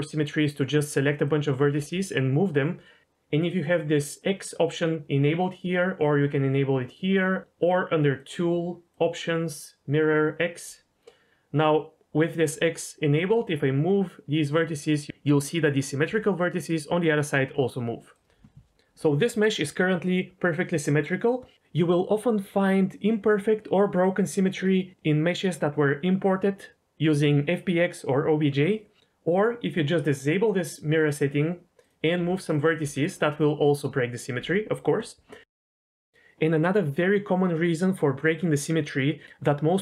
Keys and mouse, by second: 0.6 click, 1.7 g, 4.1 click, 5.7-6.8 drag, 8.1 click, 8.9 click, 13.0 g, 16.0 g, 18.1 right click, 29.0 ctrl+z, 30.9 click, 32.1 g, 32.4 click, 32.6 click, 32.8 g, 33.3 click, 35.4 ctrl+z, 35.5 ctrl+z, 35.7 ctrl+z.